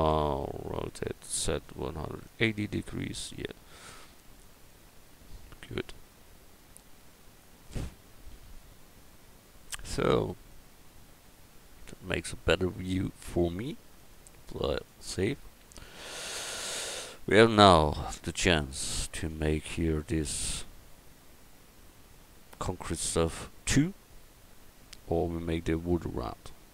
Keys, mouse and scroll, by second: 1.1 r, 4.6-7.4 drag, 7.6 middle click, 8.3 a, 10.1 a, 15.4 click, 15.9 middle click, 16.5-18.0 middle drag.